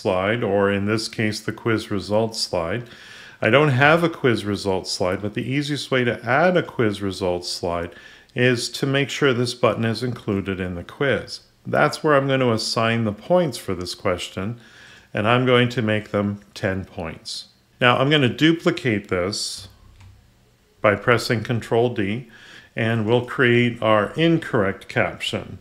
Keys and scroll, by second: 19.8 ctrl+d.